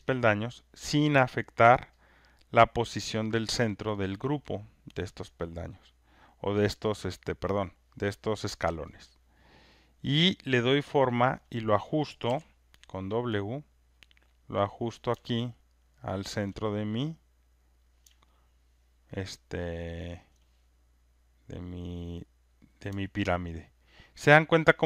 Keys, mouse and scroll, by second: 1.8 alt+right click, 2.6 alt+click, 3.9 alt+right click, 5.8 alt+click, 7.2 alt+click, 8.6 alt+right click, 11.3 alt+click, 12.3 alt+click, 13.3 alt+middle click, 14.8 click, 14.8 w, 16.4 click, 17.8 click, 20.2 alt+click, 22.5 click, 24.6 alt+click.